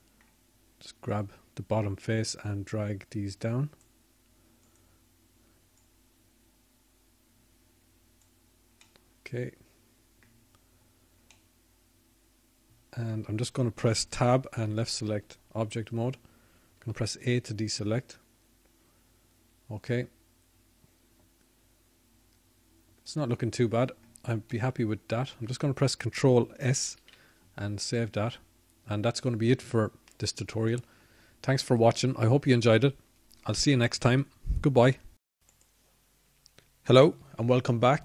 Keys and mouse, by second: 14.9 middle click, 16.3-17.3 middle drag, 19.8 Tab, 22.6 a, 29.8-32.6 middle drag, 33.0 ctrl+s.